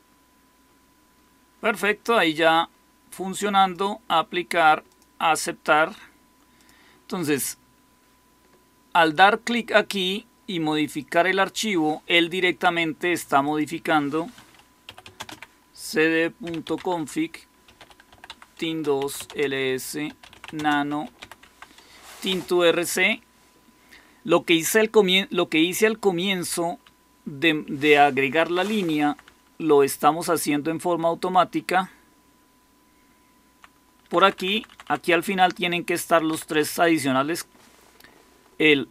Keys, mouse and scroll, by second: 11.4-14.8 drag, 14.5-26.3 typing, 18.6 Return, 22.2 Return, 26.8-28.8 Down, 28.9 Down, 29.4-31.2 Down, 31.5-33.5 Down, 31.7-32.5 typing, 33.9 Down, 34.0-36.0 typing, 35.0 Up, 35.2 Up, 36.2 Up.